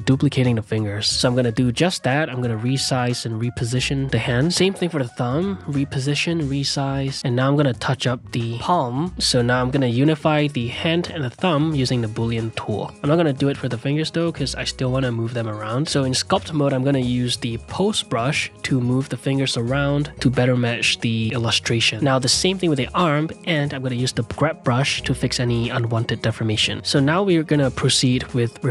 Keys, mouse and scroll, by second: 0.5 click, 1.2 middle click, 1.5-7.4 typing, 3.1 click, 4.3 click, 4.8 shift+middle click, 6.3 middle click, 7.9 click, 8.5 middle click, 8.7 click, 8.8 shift+r, 9.6 ctrl+r, 9.8 middle click, 10.0 shift+click, 10.4 ctrl+z, 10.5 shift+click, 10.9 ctrl+z, 11.0 shift+click, 11.5 q, 13.1-14.7 drag, 14.9 click, 15.5 f, 15.8 shift+click, 16.3 middle click, 16.5 f, 16.8 click, 17.5 ctrl+Tab, 17.7 g, 18.1 f, 18.6 click, 19.5 f, 19.9 click, 20.4 r, 21.0 r, 21.4 click, 22.0 f, 22.2-23.4 drag, 23.4 f, 23.8 f, 24.3 f, 24.4-25.6 drag, 25.4 ctrl+Tab, 25.6-28.7 typing, 26.7 ctrl+click, 26.8 ctrl+z, 27.1 ctrl+click, 27.8 click, 28.2 click, 28.5 middle click.